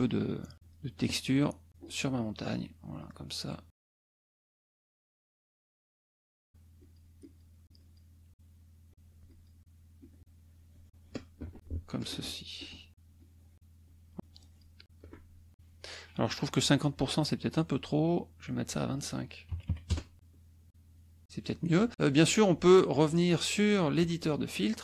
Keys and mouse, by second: 0.4 shift+click, 0.9 shift+click, 1.3 shift+click, 1.7 shift+click, 2.2 shift+click, 2.9 shift+click, 4.0 shift+click, 4.4 shift+click, 5.2 shift+click, 5.7 shift+click, 6.5 shift+click, 6.8 shift+click, 7.3 shift+click, 7.6 shift+click, 8.9 shift+click, 9.3 shift+click, 9.9-11.3 shift+drag, 12.1 shift+click, 12.8 shift+click, 13.2 shift+click, 14.1 shift+click, 18.5 click, 19.5 KP_2, 19.9 KP_Enter, 22.9 click, 24.1 click.